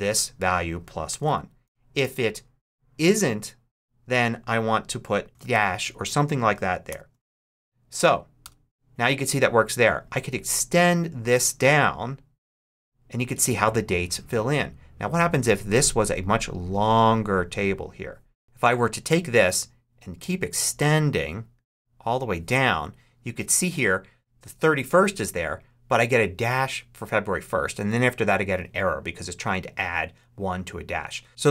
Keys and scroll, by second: 0.7-1.9 typing, 5.3 shift+-, 5.4 shift+', 6.7 shift+0, 8.3 Return.